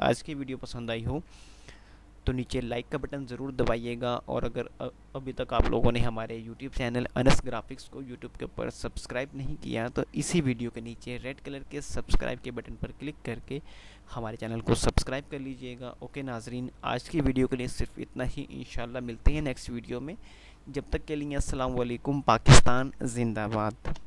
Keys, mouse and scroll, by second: 22.8 Escape.